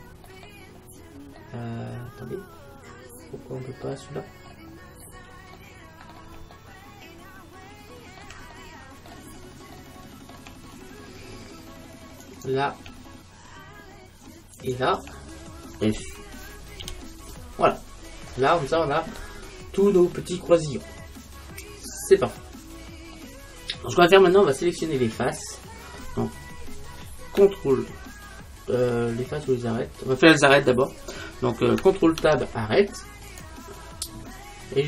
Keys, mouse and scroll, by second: 3.0 middle click, 3.3 middle click, 4.3-7.5 middle drag, 7.7 middle click, 12.3-14.1 right drag, 14.6-16.4 right drag, 16.9 f, 17.7-20.4 middle drag, 22.3-23.1 scroll down 1, 23.1-24.7 scroll down 1, 32.3 ctrl+Tab, 34.1 middle click, 34.6 middle click.